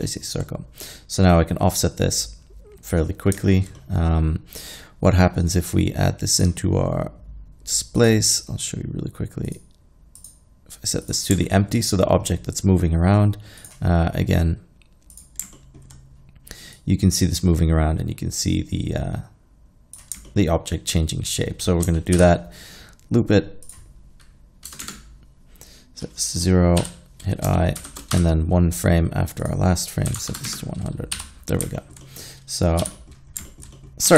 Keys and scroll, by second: 22.2 shift+Left, 24.7 KP_0, 24.8 Return, 26.9 i, 27.8 shift+Right, 30.1 KP_1, 30.2 KP_0, 30.3 KP_0, 30.5 Return, 31.2 i, 32.8 z.